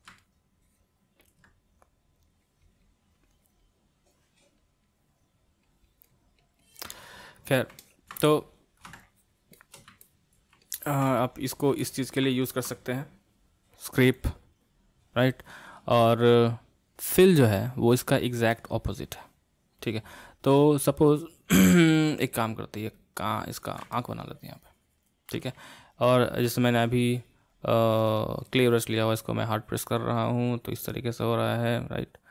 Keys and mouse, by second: 0.2-1.9 middle drag, 1.9-7.0 drag, 7.0-9.0 middle drag, 9.0-10.0 shift+drag, 10.0-14.1 middle drag, 14.1-17.1 drag, 21.1 click, 21.8-23.9 middle drag, 23.9-26.9 ctrl+drag, 28.5-31.5 ctrl+drag.